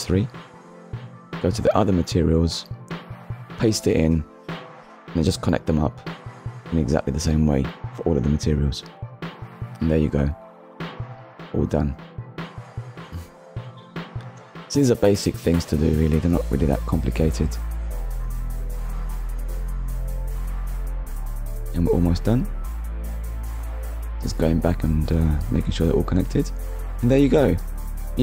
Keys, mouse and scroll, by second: 0.0 ctrl+s, 0.4 shift+middle click, 0.7 click, 0.9 ctrl+v, 1.1 click, 1.3 click, 1.5 shift+click, 1.7 click, 2.2 click, 2.6 middle click, 2.8 scroll down 1, 3.1 click, 3.3 click, 3.8 click, 4.9 click, 5.4 click, 6.2 shift+click, 6.4 shift+click, 6.7 ctrl+c, 7.2 click, 7.6 click, 8.1 ctrl+v, 8.4 click, 9.0 click, 9.7 click, 10.1 click, 10.3 click, 11.3 ctrl+v, 11.6 click, 12.1 click, 12.7 click, 14.0 click, 14.6 click, 15.1 click, 15.6 click, 16.0 click, 16.5 click, 17.1 click, 17.5 click, 18.0 click, 18.3 click, 18.9 click, 19.2 click, 19.6 click, 20.2 ctrl+v, 20.4 click, 20.8 click, 21.5 click, 22.0 click, 22.4 click, 22.9 click, 23.2 click, 23.7 click, 24.1 click, 24.5 click, 25.1 click, 25.3 click, 25.5 click, 25.7 click, 25.9 click, 26.3 click, 27.0 click, 27.7 middle click.